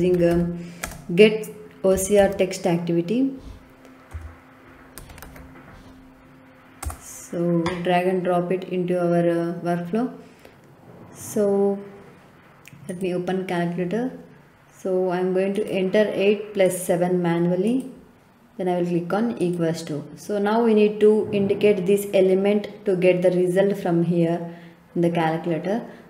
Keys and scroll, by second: 0.0-0.8 typing, 1.9 o, 2.2 s, 4.1 BackSpace, 4.9 c, 5.2 r, 6.7 Return.